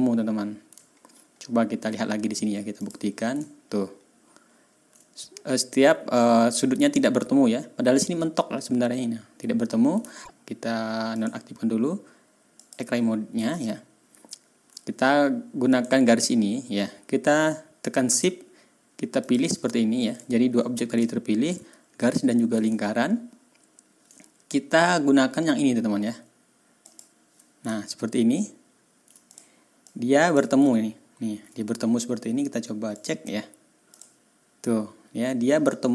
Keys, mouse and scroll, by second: 0.8-1.8 ctrl+scroll down 2, 2.7 middle click, 3.6-4.6 ctrl+scroll up 4, 10.1 ctrl+scroll down 2, 11.1 middle click, 12.5 middle click, 13.6-14.4 ctrl+scroll up 4, 14.4 ctrl+scroll down 2, 15.7 click, 19.2 shift+click, 20.2 ctrl+scroll down 2, 21.0-21.4 ctrl+scroll up 2, 22.9-23.3 ctrl+scroll up 2, 26.8 click, 28.0 ctrl+scroll up 2, 28.4-28.9 ctrl+scroll down 2, 29.3 ctrl+middle click, 29.8 middle click, 30.8-31.4 ctrl+scroll up 4, 32.9 middle click, 33.9 click, 34.6 click.